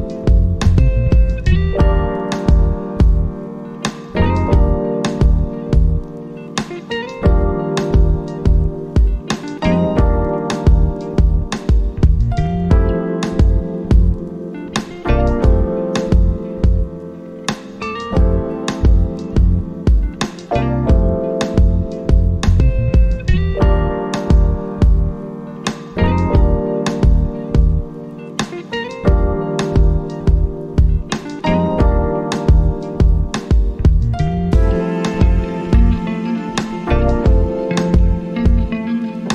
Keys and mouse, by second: 3.0 click, 18.5 click, 21.8 click, 24.0 click, 30.0 click, 32.2 click, 36.9 click.